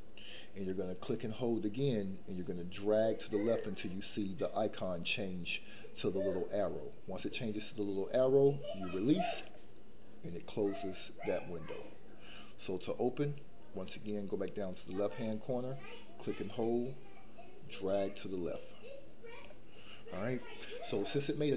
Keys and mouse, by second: 1.2-9.5 drag, 15.9-19.5 drag.